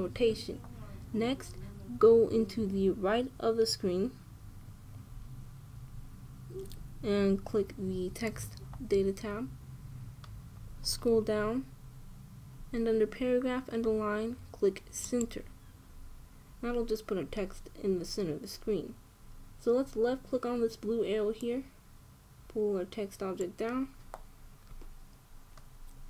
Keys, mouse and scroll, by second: 9.0-10.9 drag, 11.6-14.5 middle drag, 15.8-18.2 drag, 22.1-24.0 drag.